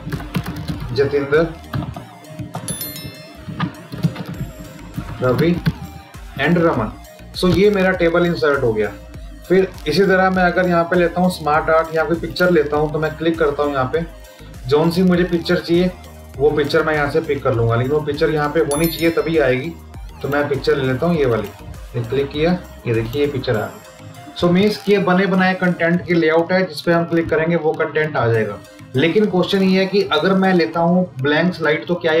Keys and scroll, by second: 3.2 Down, 4.8 Down.